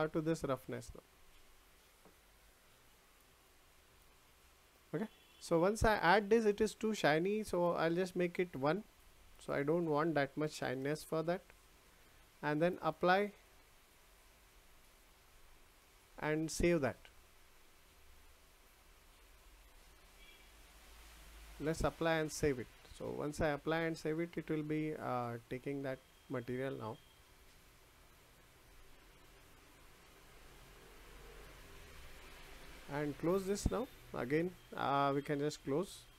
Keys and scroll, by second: 10.8 Return.